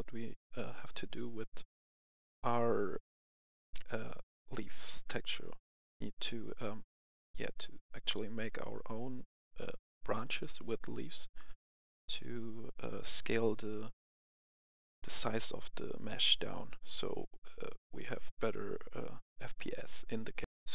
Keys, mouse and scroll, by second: 1.6 click, 5.2 click, 7.1 click, 15.3 click, 20.4 F10.